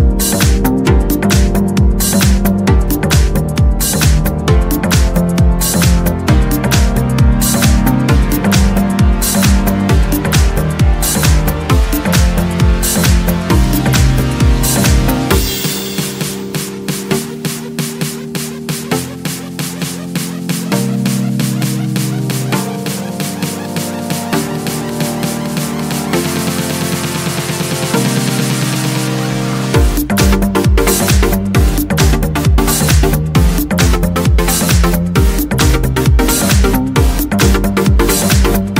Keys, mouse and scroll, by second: 1.4 click, 3.2 click, 5.7 click, 7.4 click, 9.2 click, 11.2 click, 12.8 click, 14.2 click, 15.8 click, 17.7 click, 19.8 click, 21.3 click, 24.7 click, 27.4 click, 31.8 click, 33.0 click, 34.5 KP_2, 34.9 KP_5, 38.1 0.